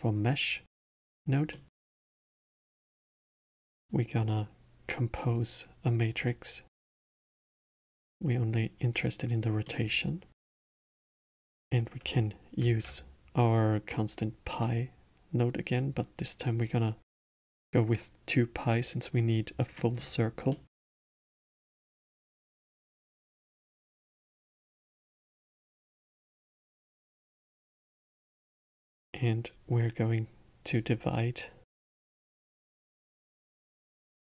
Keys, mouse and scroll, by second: 1.5-2.4 middle drag, 2.4 shift+a, 6.7 click, 7.8-8.8 middle drag, 8.8 click, 9.6-11.6 middle drag, 11.6 click, 12.6 shift+d, 14.7 click, 15.6-18.7 drag, 19.7-21.4 middle drag, 21.4 click, 22.2 shift+d, 24.0-25.1 drag, 25.1-28.2 middle drag, 30.6 click, 32.1-34.2 drag.